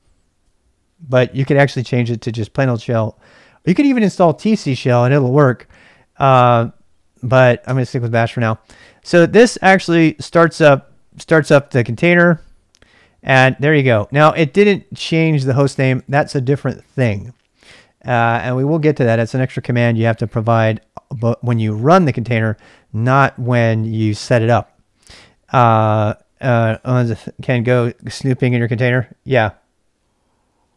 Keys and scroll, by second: 7.7 Return, 13.4-14.4 typing.